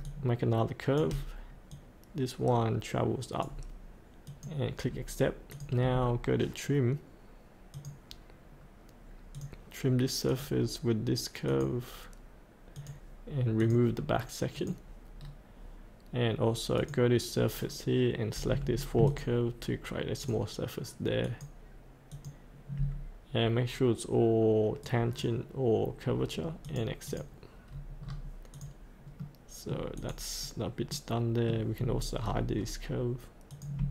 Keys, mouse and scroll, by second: 0.0 shift+click, 1.7-3.9 drag, 4.8-5.5 scroll up 1, 5.5 click, 15.2-15.5 scroll down 1, 16.7 click, 17.6-19.0 scroll down 1, 19.0 ctrl+click, 20.2 ctrl+click, 24.8 right click, 26.6 click, 27.7-28.0 scroll up 1, 28.7 click, 29.2 middle click, 29.9 click, 30.6-31.0 scroll up 1, 31.0 middle click, 31.8-33.5 scroll down 3, 33.5 click.